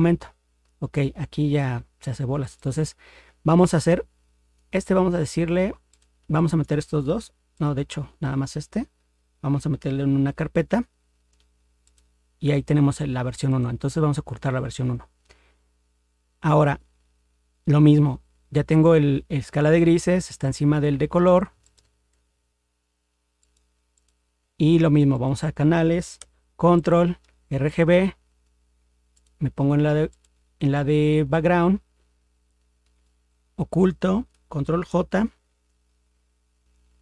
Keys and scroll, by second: 10.1 ctrl+g, 35.0 ctrl+j.